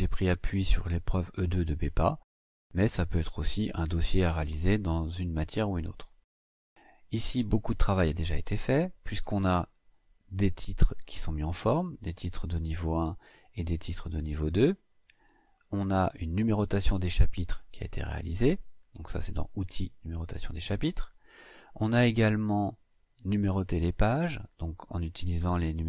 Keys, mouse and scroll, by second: 10.2 click, 12.7-13.4 scroll down 4, 13.7-14.0 scroll down 2, 15.2 click, 16.3 click, 21.2-21.5 scroll up 2, 23.2 click.